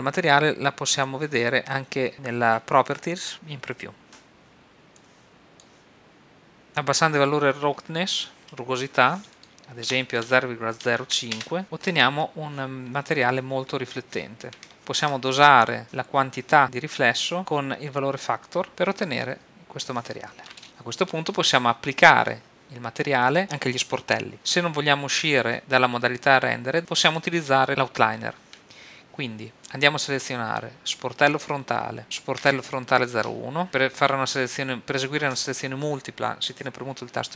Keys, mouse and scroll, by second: 1.0-2.1 drag, 3.3-6.6 drag, 8.1-11.0 drag, 18.4 click, 24.3-25.6 drag, 31.3 click, 32.4-33.6 drag.